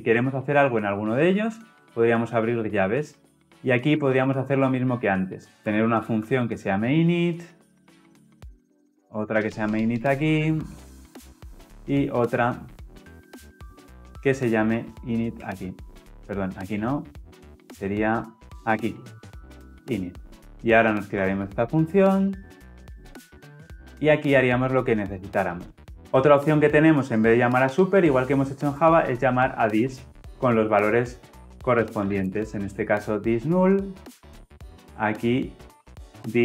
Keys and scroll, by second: 16.5 ctrl+z, 18.5 ctrl+shift+[, 21.4 alt+Return.